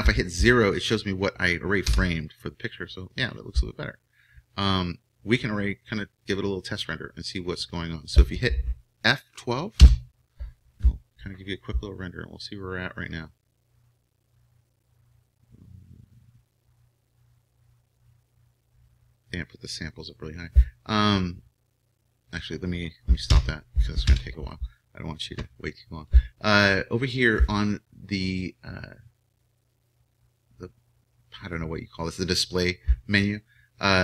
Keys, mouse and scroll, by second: 1.8 KP_0.